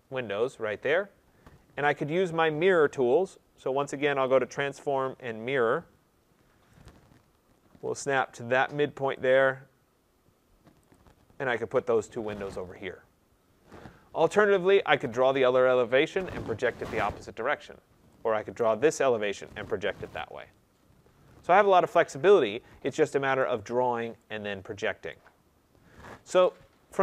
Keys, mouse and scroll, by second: 2.1 right click, 4.3 click, 6.8 click, 9.2 click, 10.9 click, 13.7-14.2 scroll, 14.7 right click, 18.6 right click, 22.0 right click, 22.4-23.3 scroll, 23.4 right click, 23.7-24.6 scroll, 25.1 right click, 25.4-25.9 scroll, 25.9-26.3 scroll, 26.8 right click.